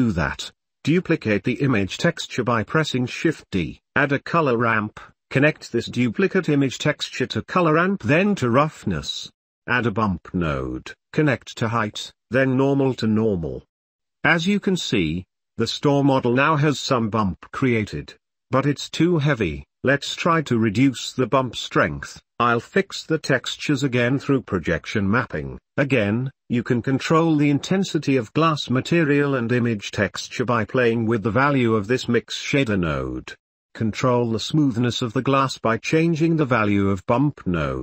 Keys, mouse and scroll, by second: 0.0 g, 2.5 shift+d, 4.3 shift+a, 6.8-7.8 drag, 8.7-10.0 drag, 10.2 shift+a, 11.6-12.8 drag, 13.3-14.0 drag, 15.6-16.1 shift+drag, 16.9 ctrl+s, 18.7 middle click, 20.6 click, 21.3 click, 21.6 middle click, 22.0 click, 22.5 ctrl+s, 22.7 click, 22.9 click, 23.3 Tab, 23.4 Tab, 23.5 click, 23.8 click, 24.0 u, 24.3 click, 25.7 ctrl+Tab, 25.8 ctrl+s, 26.1 u, 26.2 click, 26.4 s, 26.4 g, 26.6 Tab, 27.7-30.1 drag, 31.5 ctrl+s, 32.9 click, 35.9-37.0 drag.